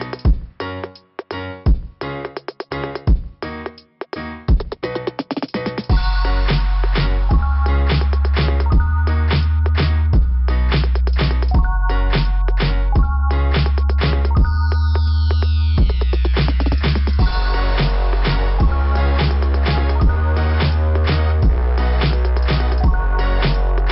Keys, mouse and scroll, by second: 0.4-0.7 scroll down 2, 0.7 scroll up 2, 3.7 click, 4.9 click, 5.0 click, 6.1 click, 6.2 click, 7.2 click, 7.6 click, 8.9 click, 9.1 click, 10.0 click, 11.4 click, 20.0 click, 20.4 click, 20.7 click, 22.4 scroll up 2, 23.7 scroll down 2.